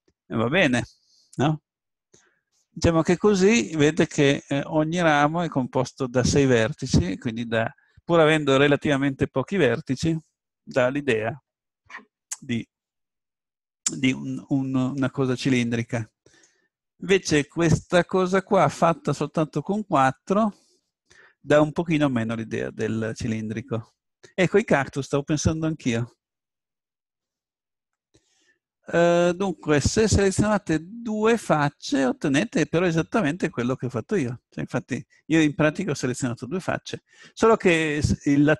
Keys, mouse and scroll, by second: 2.5-6.5 middle drag, 11.1 middle click, 11.4-12.9 drag, 12.9-16.0 middle drag, 16.0 click, 16.3-20.1 middle drag, 32.6-36.1 middle drag.